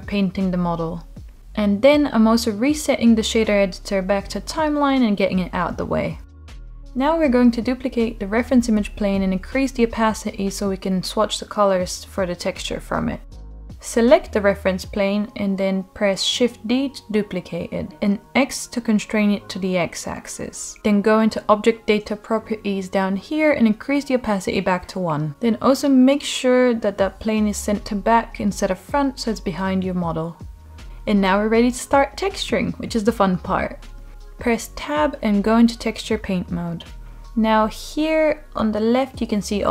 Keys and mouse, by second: 1.7-4.2 drag, 4.2-5.9 drag, 8.4 click, 16.3 shift+d, 17.8 x, 19.6-23.3 drag, 25.1 click, 27.3-28.6 middle drag, 34.2 Tab.